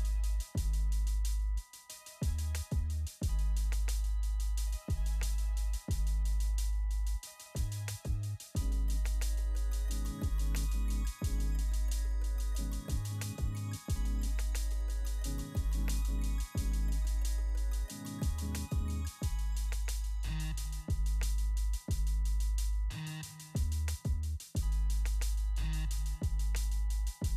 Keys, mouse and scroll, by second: 0.7 click, 3.7 click, 8.3 click, 11.5 click, 16.0 click, 23.0 click.